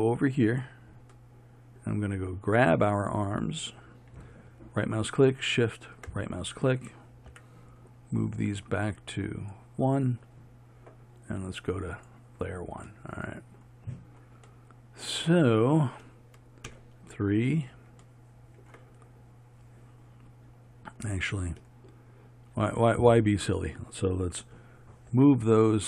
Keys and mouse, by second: 2.7-9.6 right drag, 12.0-13.1 right drag, 13.1-16.8 drag, 16.8 KP_3, 25.2 m.